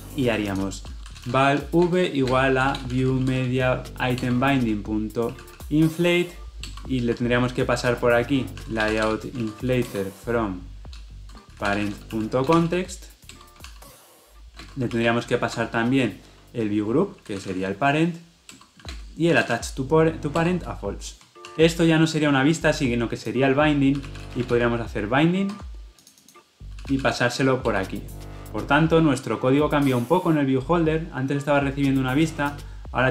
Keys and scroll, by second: 8.0 ctrl+p, 10.0 Return, 14.8 Return, 18.4 ctrl+p, 18.5 Return, 25.5 Escape, 27.6 Return.